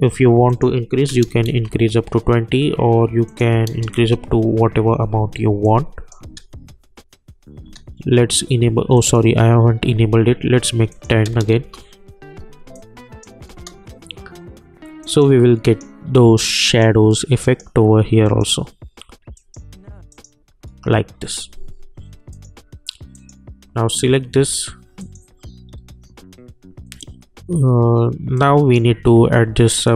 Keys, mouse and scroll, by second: 0.5 click, 1.5 Return, 3.3 click, 3.9 Return, 5.6 click, 6.2 space, 8.9 click, 11.5 Return, 12.7 click, 13.5 space, 15.0 click, 25.6 scroll up 1, 25.7 scroll down 1, 25.8-27.6 scroll up 1, 28.3-29.8 drag.